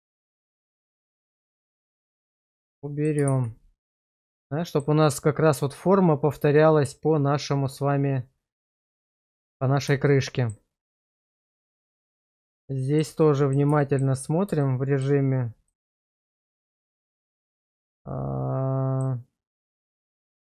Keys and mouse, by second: 1.4 ctrl+x, 2.3 middle click, 3.3 shift+z, 4.0 middle click, 10.1 shift+middle click, 11.4 shift+z, 11.8 middle click, 12.8 shift+middle click, 13.2 middle click, 13.8 shift+middle click, 14.6 shift+middle click, 15.7-19.0 middle drag.